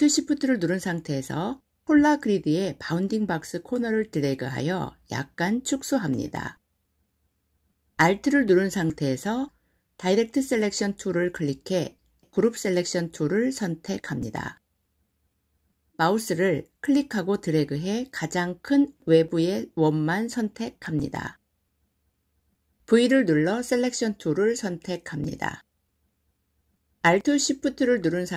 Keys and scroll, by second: 22.8 v.